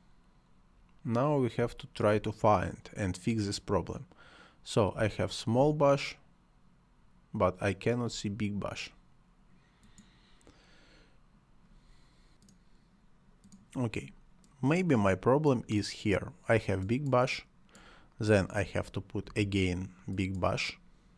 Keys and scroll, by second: 1.6 space, 4.9 space, 19.3 Delete.